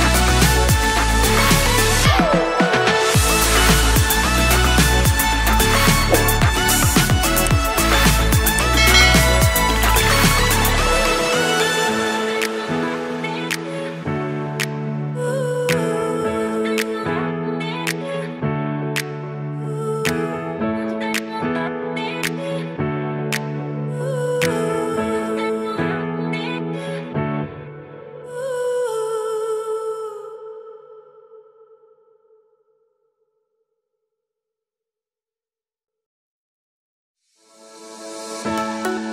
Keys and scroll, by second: 11.8 super+s, 32.4 super+Left, 32.8 shift+super+Right, 32.9 super+c, 35.2 super+v, 35.5 super+Left, 38.1 super+Right.